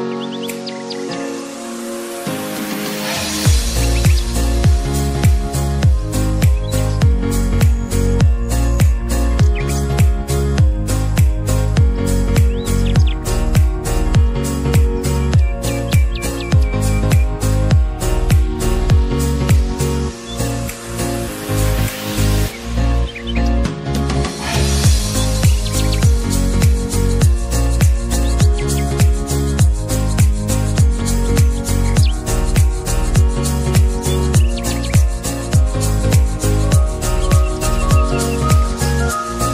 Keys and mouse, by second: 6.9-9.8 drag, 10.1 click, 12.5-21.8 drag, 21.8-35.8 alt+drag.